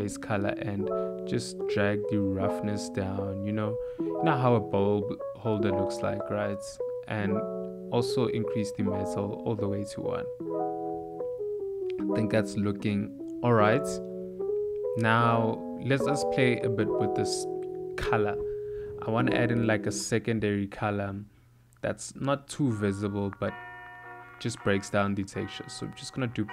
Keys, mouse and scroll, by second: 5.7 click, 7.9 click, 9.5 click, 10.0 shift+a, 13.5 middle click, 14.2 ctrl+middle click, 15.6 ctrl+shift+click, 16.2 middle click, 16.9 click, 18.8 click, 21.1 middle click, 21.8 click, 22.7 g, 24.0 click, 25.1 shift+d, 26.4 click.